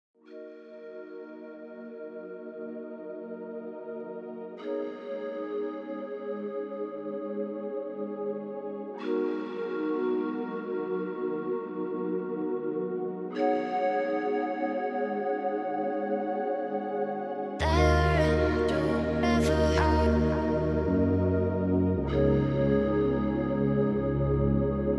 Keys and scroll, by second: 21.6 ctrl+alt+s.